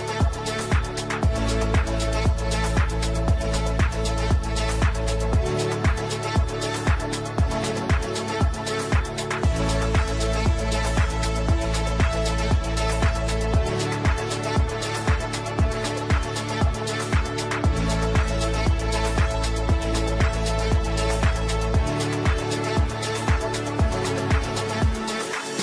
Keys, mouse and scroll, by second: 1.7-3.2 shift+drag, 3.2 c, 3.8 click, 4.0 F3, 4.3 F2, 4.7-6.4 drag, 7.4-13.0 drag, 13.0 right click, 13.7 click, 18.9-22.5 drag.